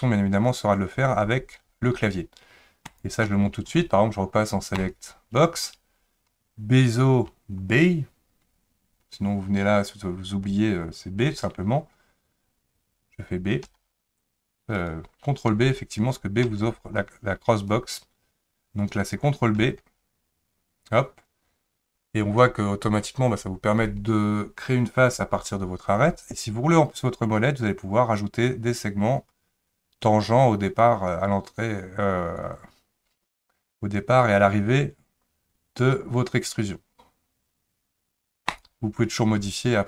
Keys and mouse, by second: 13.6 b, 16.4 b, 17.5 click, 19.6 ctrl+b.